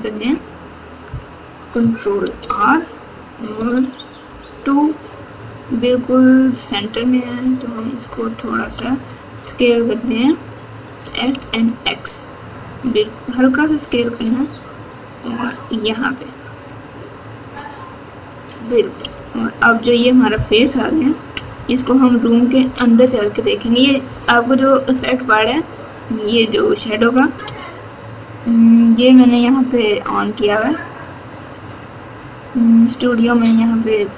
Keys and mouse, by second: 2.2 ctrl+r, 11.0 s, 19.0 3, 19.6 click, 20.5-22.6 typing, 24.0 KP_2, 24.9 KP_8, 27.4 Tab, 31.6-34.1 drag.